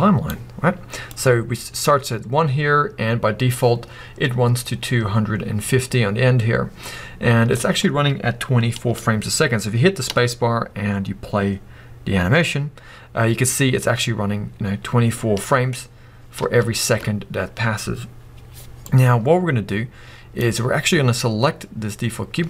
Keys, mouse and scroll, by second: 0.0-22.4 drag, 10.1 space, 16.4 space, 21.1-21.8 scroll down 1, 21.8-22.2 scroll up 1.